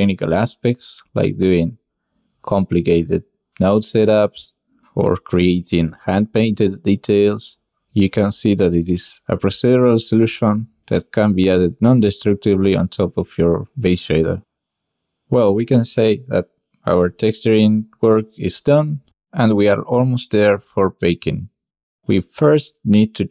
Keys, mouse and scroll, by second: 1.4 drag, 2.1 drag, 2.6 drag, 3.4 click, 4.8 click, 5.9 click, 7.0 drag, 7.4 shift+click, 7.7 click, 8.1 shift+click, 8.1 shift+middle click, 8.1 shift+right click, 9.7 click, 11.1 shift+middle click, 11.4 click, 11.6 shift+middle drag, 12.2 shift+middle click, 12.6 shift+click, 14.4 click, 15.9 middle click, 16.1 shift+middle drag, 16.3 middle click, 16.5 shift+middle click, 16.7 click, 16.8 shift+click, 17.0 shift+click, 17.4 ctrl+s, 19.3-23.3 drag.